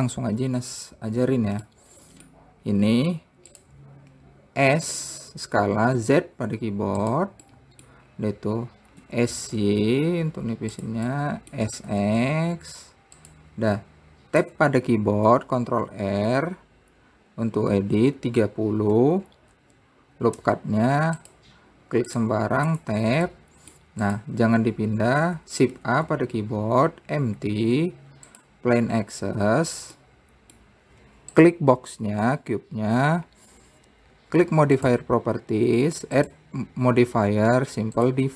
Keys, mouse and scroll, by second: 2.3 middle click, 3.2-4.1 scroll up 2, 4.1 click, 5.3 s, 8.0 middle click, 8.6-9.4 scroll down 2, 9.6 s, 11.7 middle click, 12.2 s, 15.0 Tab, 16.4 ctrl+r, 22.7 click, 23.3 Tab, 23.9 middle click, 24.6 click, 26.2 shift+a, 30.6-31.9 middle drag, 31.9 click, 35.4 click.